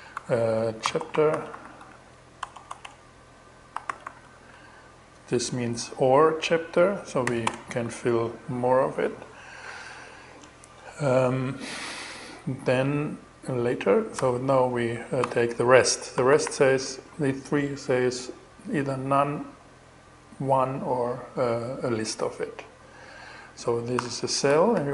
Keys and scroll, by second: 0.0-1.9 typing, 3.0-4.3 typing, 6.7 ,, 13.6 x, 14.4 2, 15.6 shift+-, 23.4 alt+6, 23.9 alt+shift+6, 24.2 alt+shift+., 24.6-24.9 typing.